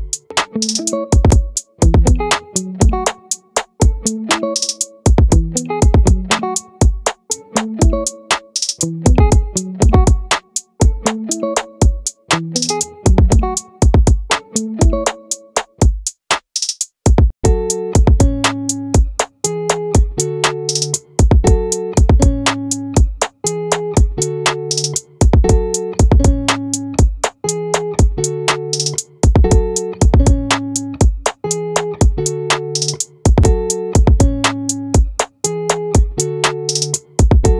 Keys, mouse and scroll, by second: 2.9-6.3 right drag, 2.9 r, 11.3-14.2 drag, 18.4-22.0 drag, 22.0 r, 25.4-28.6 drag, 32.0-35.2 drag.